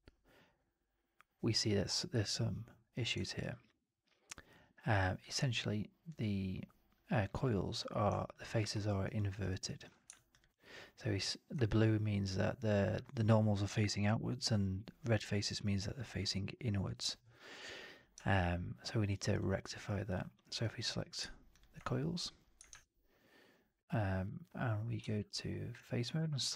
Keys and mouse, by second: 3.2 alt+right drag, 3.4-5.1 alt+drag, 6.0-8.0 drag, 8.2 alt+drag, 8.5 alt+middle drag, 8.7 alt+right drag, 8.9 alt+drag, 9.2 alt+right drag, 9.4 alt+drag, 18.2-19.0 alt+drag, 19.1 alt+right drag, 19.3-19.7 alt+drag, 20.0-20.8 drag, 21.4 shift+drag, 22.6 shift+Tab, 25.2 3, 26.2 ctrl+a.